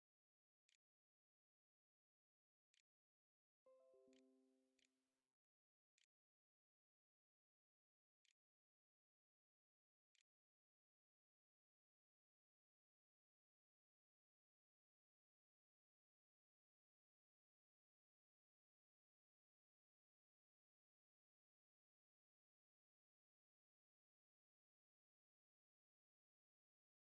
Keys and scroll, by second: 0.0-7.4 typing, 7.7 Tab, 8.6-11.5 typing.